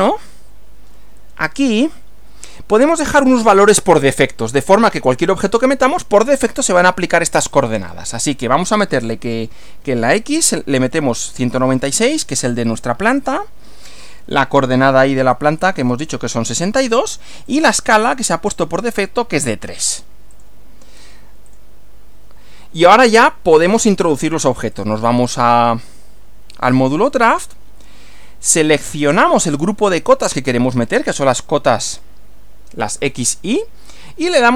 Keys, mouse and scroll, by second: 1.5 click, 7.4 click, 10.8-11.9 typing, 12.7 click, 13.1 click, 16.0 6, 17.4 click, 18.7 3, 20.4 click, 21.5 click, 24.7 click, 26.5 click, 31.9 click.